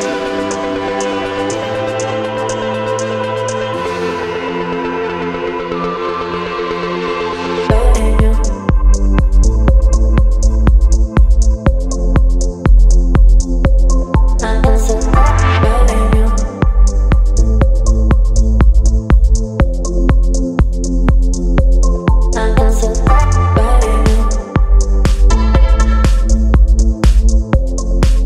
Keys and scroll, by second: 0.6 space, 11.2 space, 11.8 space, 16.3 Delete, 21.4 space, 25.0 Delete, 27.8 Delete.